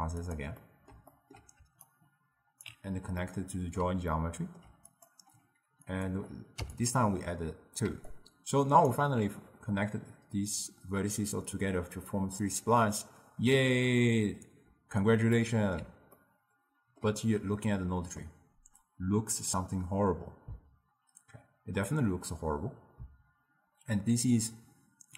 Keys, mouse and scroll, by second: 0.7-2.0 middle drag, 2.0-3.3 alt+right drag, 3.3-5.0 middle drag, 5.0 click, 5.9-7.0 drag, 8.0 d, 8.2 right click, 9.1 d, 15.4-20.5 middle drag.